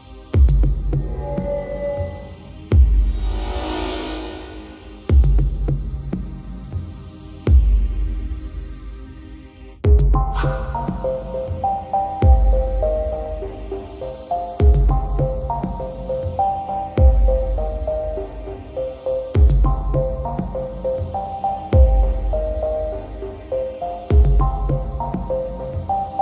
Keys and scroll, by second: 4.5 ctrl+u, 12.1 ctrl+j, 12.3 ctrl+t, 17.3 ctrl+u, 22.8 ctrl+t.